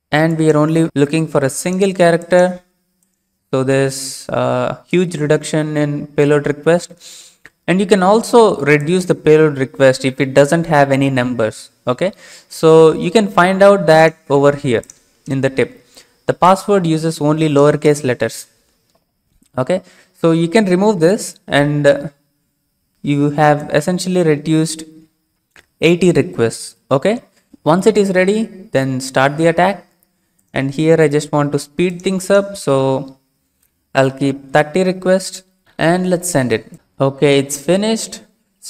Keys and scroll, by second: 1.3 typing, 2.6 typing, 19.3 alt+Tab, 21.6 BackSpace, 34.2-35.0 typing.